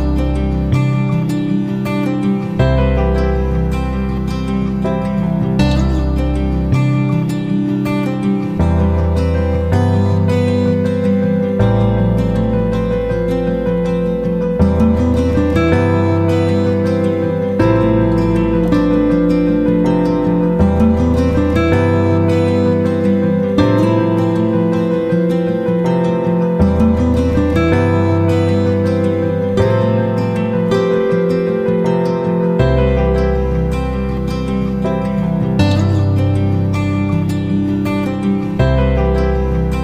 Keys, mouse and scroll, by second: 3.8 F9, 4.1-10.6 drag, 10.7 click, 11.2 F9, 11.9-15.1 drag, 17.7 shift+Down, 18.1 typing, 20.6-38.7 drag, 39.2-39.8 drag.